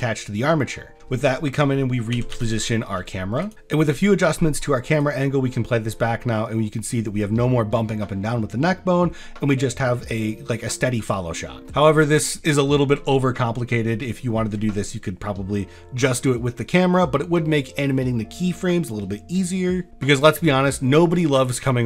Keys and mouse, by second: 2.1 r, 2.3 y, 3.5 ctrl+s, 5.0 click, 20.2 click, 21.1 click.